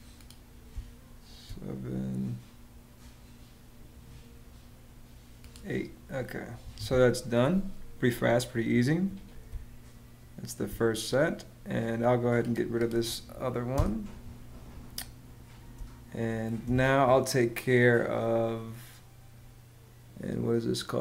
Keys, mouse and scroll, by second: 0.4 space, 6.3 Escape, 9.2 space, 13.4 BackSpace, 15.5 space.